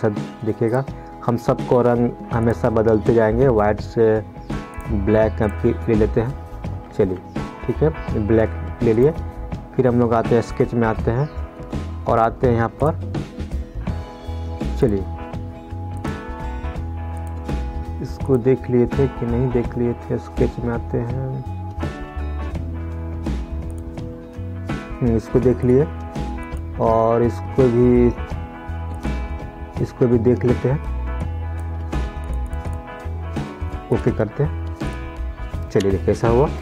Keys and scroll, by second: 7.5 ctrl+z.